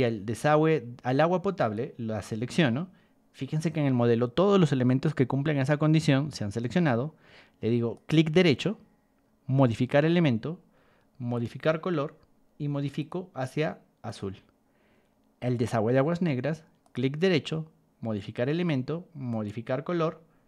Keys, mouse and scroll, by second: 1.5 click, 7.9 right click, 11.3 click, 13.0 click, 14.0 click, 15.5 click, 16.8 right click, 19.3 click.